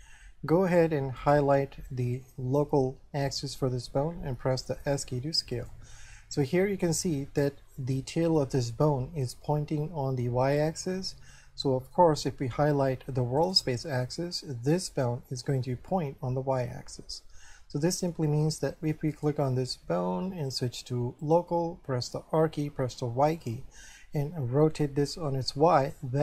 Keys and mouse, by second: 1.2 right click, 4.7 s, 5.6 click, 11.3 shift+middle click, 13.4 right click, 14.2 middle click, 17.5 shift+middle click, 19.2 right click, 20.5 click, 22.4 r, 23.2 y.